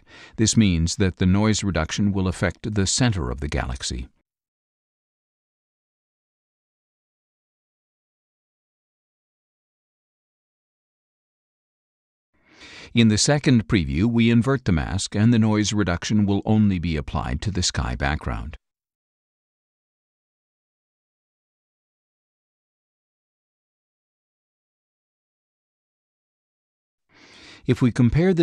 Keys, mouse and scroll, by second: 0.9 click, 5.9 click, 8.5 click, 13.8 click, 16.2 click, 17.3 click, 18.3-20.2 drag, 21.7 click, 24.2 click.